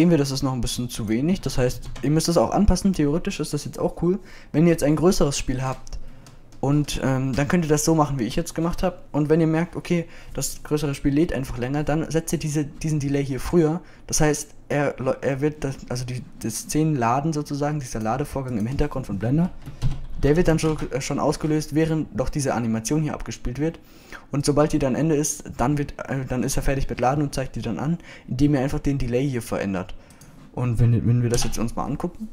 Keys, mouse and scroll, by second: 3.2-3.9 drag, 25.8-27.6 drag, 27.6 middle click, 31.5 click.